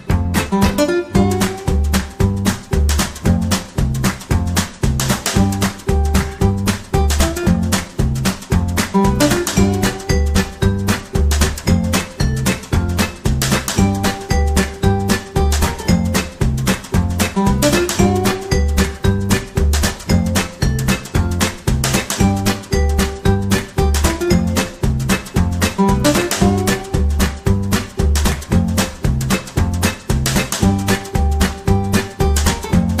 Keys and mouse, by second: 0.7 middle click, 1.2 middle click, 2.3 KP_3, 2.8 shift+middle click, 4.1 Tab, 5.3 ctrl+l, 6.6 shift+d, 8.2 r, 9.3 r, 10.3 KP_1, 11.0 g, 12.6 KP_3, 13.0-13.4 shift+middle drag, 13.9 r, 15.1 g, 15.7 KP_1, 16.2 shift+middle click, 17.1 g, 17.9 KP_3, 19.0 s, 20.3 KP_1, 21.7 g, 21.7 KP_3, 22.6 g, 24.9 shift+d, 25.5 r, 27.1 r, 28.5 KP_1, 28.9 shift+middle click, 29.7 g, 30.6 KP_3, 31.2 g, 32.6 r.